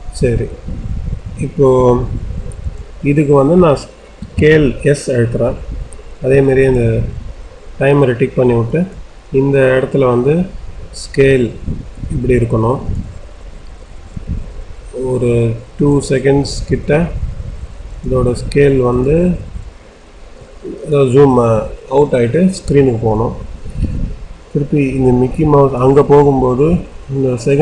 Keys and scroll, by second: 4.1 s.